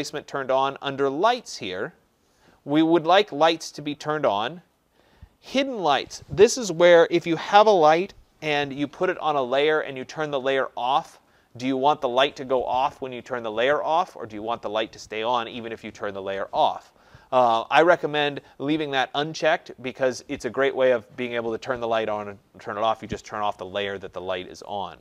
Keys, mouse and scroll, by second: 0.2 click, 1.5 click.